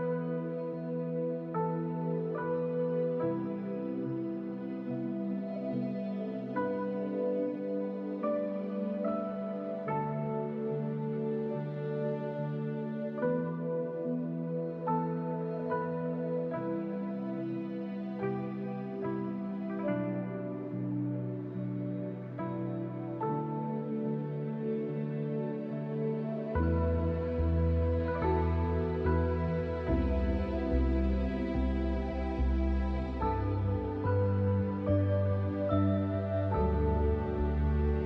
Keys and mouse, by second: 0.6 shift+click, 0.9 click, 1.5 click, 3.4 click, 6.4-7.4 drag, 8.1 alt+shift+click, 8.4 click, 9.4 click, 10.8 alt+shift+click, 11.0 click, 12.0 click, 12.8 alt+shift+click, 13.3 click, 15.2 alt+shift+click, 16.6 alt+shift+click, 17.1 click, 18.6 click, 20.1 middle click, 20.9 alt+shift+click, 21.3 middle click, 23.6 click, 24.8 alt+shift+click, 25.3 click, 27.7 alt+shift+click, 28.8 alt+shift+click, 29.9 alt+shift+click, 30.6 alt+shift+click, 31.1 alt+shift+click, 32.1 click, 32.8 alt+shift+click, 34.0 shift+click, 34.3 click, 35.6 alt+shift+click, 36.7 alt+shift+click, 37.3 alt+shift+click.